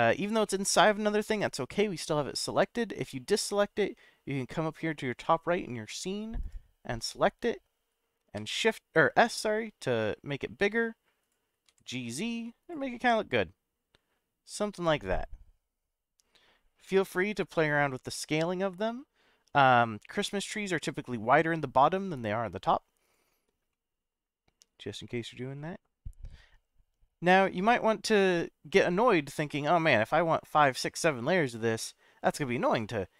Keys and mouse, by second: 0.1 click, 0.4-2.6 middle drag, 3.0 click, 8.4 s, 11.2 click, 11.7 g, 11.9 z, 12.6 click, 12.9-16.7 middle drag, 18.1 middle click, 19.5-20.9 middle drag, 23.7-25.5 middle drag, 31.8-32.8 middle drag.